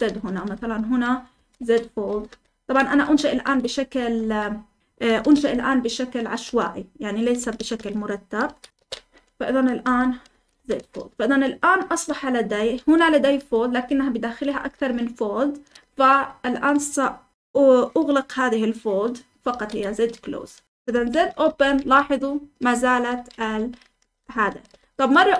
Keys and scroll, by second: 0.0-16.2 typing, 19.2-25.3 typing, 20.2 Escape.